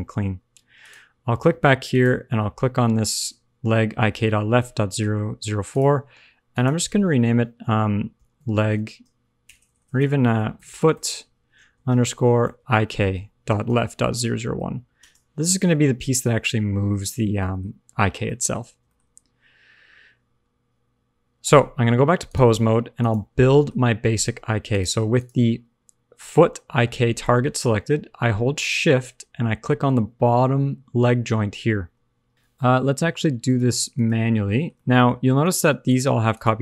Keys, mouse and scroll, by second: 0.7 click, 1.8 click, 5.7 click, 6.4 click, 9.5 BackSpace, 9.7 BackSpace, 9.9 BackSpace, 10.7 o, 14.2 0, 17.1 scroll down 3, 17.3 middle click, 17.6-18.2 scroll up 1, 18.2 middle click, 18.2-18.7 scroll up 1, 18.8 shift+middle click, 19.1 scroll down 1, 23.4 click, 23.4 middle click, 23.7-24.1 scroll up 1, 24.6 click, 25.1 click, 28.5 shift+click, 32.3 click, 33.4 click, 33.9 click, 34.7 shift+middle click, 35.3 click, 35.8 click, 36.3 click.